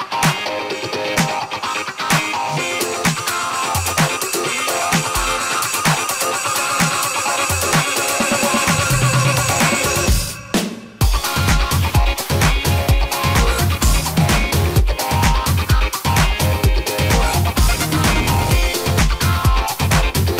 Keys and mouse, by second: 0.9-2.1 middle drag, 2.1 click, 2.1 middle drag, 2.3 click, 2.4 middle drag, 2.5-3.7 drag, 3.7-5.8 middle drag, 5.8 drag, 6.4 click, 6.5-7.1 middle drag, 7.1-7.9 drag, 7.9-8.3 middle drag, 8.9 middle click, 11.5-14.6 middle drag, 14.0 y, 14.6-16.9 drag, 16.7 middle click, 17.2-18.5 drag, 18.7-19.5 drag.